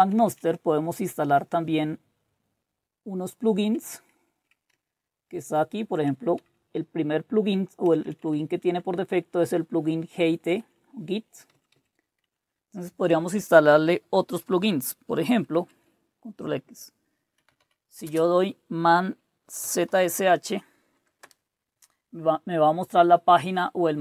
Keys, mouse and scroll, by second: 0.0-1.4 typing, 5.2 typing, 6.4-7.1 typing, 7.2-7.8 Up, 8.0 Down, 8.6-9.4 Down, 9.6 Up, 10.3 Up, 10.4 Left, 10.6 Left, 11.5 Left, 12.2 Left, 15.6 ctrl+x, 17.1-18.1 typing, 19.6-21.2 typing.